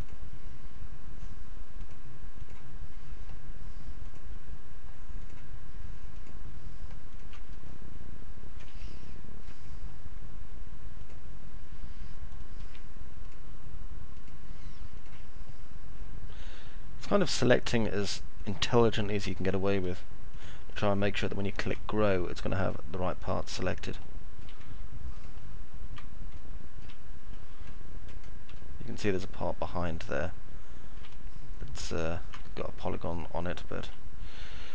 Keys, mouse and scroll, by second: 6.0 ctrl+click, 7.0 ctrl+click, 7.3-8.6 alt+middle drag, 8.8 middle click, 12.6 ctrl+z, 20.1 ctrl+click, 23.8 alt+middle click, 25.0 ctrl+click, 26.3 alt+middle click, 27.6 middle click, 28.3-30.8 alt+middle drag, 31.8 ctrl+click, 32.3-33.8 alt+middle drag.